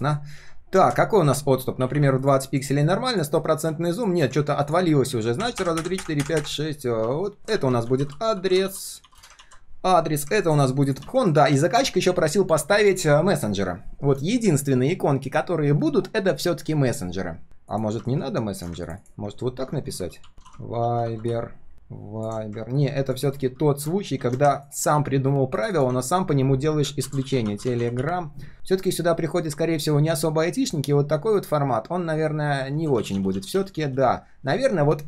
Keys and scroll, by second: 3.4 ctrl+shift+4, 7.4 ctrl+g, 7.5 ctrl+r, 9.3 ctrl+s, 11.0 ctrl+s, 24.8 ctrl+d, 32.8 ctrl+z, 33.0 ctrl+z, 33.1 ctrl+z, 33.3 ctrl+z.